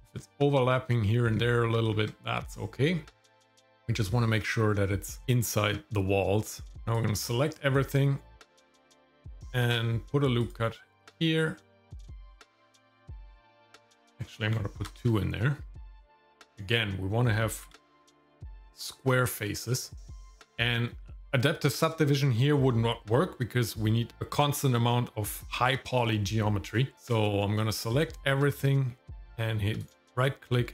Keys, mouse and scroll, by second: 1.9 Tab, 6.9 click, 9.7 ctrl+r, 14.0 ctrl+z, 14.8 ctrl+r, 17.6 ctrl+r, 27.6 click, 29.8 right click.